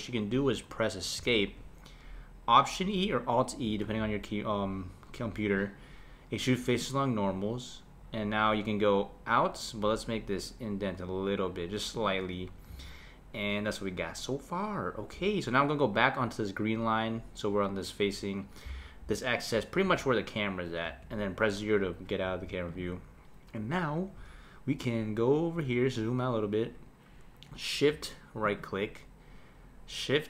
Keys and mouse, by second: 3.8 alt+e, 12.7 Tab, 19.8 KP_0, 20.8 KP_0, 22.7 click, 28.5 shift+right click.